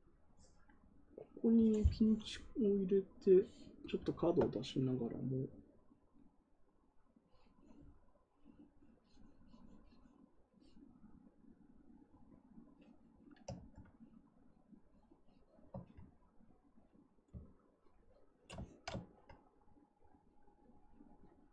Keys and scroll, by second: 13.5 ctrl+z.